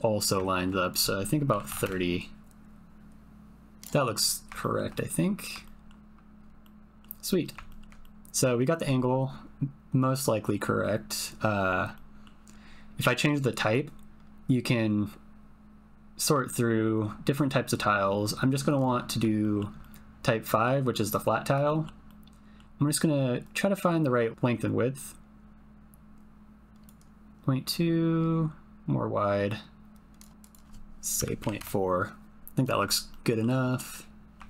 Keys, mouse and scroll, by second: 0.9-1.9 drag, 2.4-3.9 shift+drag, 4.6 shift+middle click, 5.0 middle click, 5.6 shift+click, 6.6 click, 6.7 middle click, 7.4 click, 7.6 ctrl+click, 8.0 click, 11.9 click, 12.1 middle click, 13.7-18.8 drag, 19.4 shift+middle click, 19.8 middle click, 21.6 shift+middle click, 22.0 middle click, 23.4-26.9 drag, 27.8-29.1 drag, 33.1 shift+middle click, 33.7 middle click.